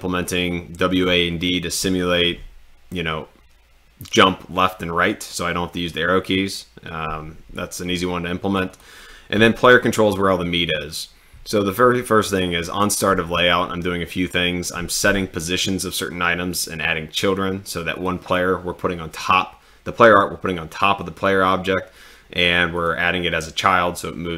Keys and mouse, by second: 8.7 click, 17.9 click.